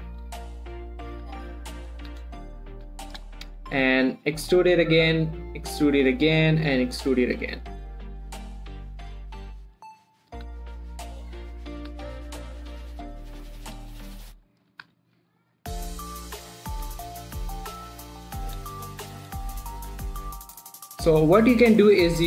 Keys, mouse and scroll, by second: 0.5 click, 1.5 g, 2.2 click, 2.4 3, 2.8 shift+middle click, 3.0 scroll up 1, 3.2 g, 3.5 click, 3.8 shift+middle click, 3.9 shift+scroll up 1, 4.0 e, 4.8 click, 5.1 shift+middle click, 5.2 shift+scroll up 1, 5.5 e, 6.4 click, 6.7 e, 7.4 click, 8.2 g, 10.2 click, 10.5 scroll down 1, 10.8 1, 11.3 shift+middle click, 11.9 click, 12.2 g, 12.5 x, 13.1 click, 14.9 click, 15.2 g, 15.4 x, 15.9 click, 17.8 scroll up 1, 17.9 g, 18.3 click, 18.6 shift+scroll down 1, 18.9 shift+middle click, 19.1 z, 19.6 scroll down 1, 20.0 shift+middle click, 20.2 shift+z, 20.5 shift+middle click, 20.7-21.4 scroll up 1, 21.4 click.